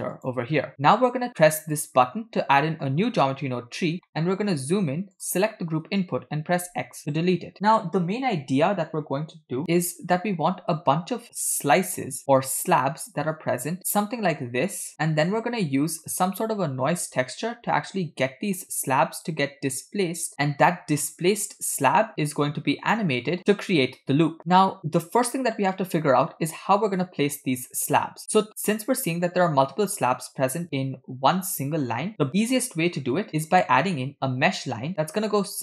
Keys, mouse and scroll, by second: 1.8 click, 2.6 middle click, 2.9-3.8 scroll up 1, 3.8 scroll up 8, 4.1 middle click, 4.6-5.1 scroll up 1, 5.2 click, 6.6 x, 12.5 e, 12.6 click, 13.8 click, 14.3 click, 14.9 click, 15.5 click, 16.1 click, 17.0 click, 19.2-20.8 drag, 21.2 click, 22.1 click, 22.9 click, 27.8 click, 28.3 click, 28.7 click, 29.3 click, 30.2 click, 33.2 ctrl+click, 34.9-35.6 drag.